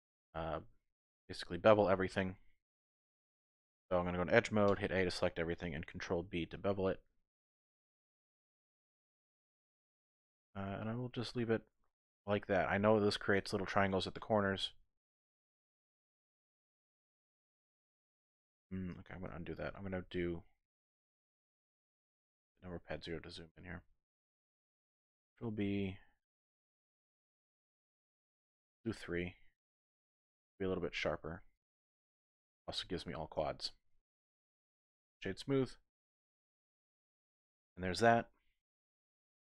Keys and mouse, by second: 0.1 Tab, 2.0 Tab, 2.9 3, 3.7 2, 4.7 a, 6.0 ctrl+b, 13.3 click, 14.3 Tab, 16.1 ctrl+2, 17.0 click, 17.7 Tab, 18.1 click, 19.0 ctrl+z, 19.3 ctrl+z, 19.7 ctrl+z, 20.3 ctrl+z, 22.2 KP_Decimal, 23.3-24.5 middle drag, 25.3 ctrl+b, 31.5 click, 33.4 Tab, 34.7 click, 35.1 typing, 35.4 middle click, 36.0 click, 36.6 middle click, 36.8-37.6 typing, 37.6-38.9 middle drag.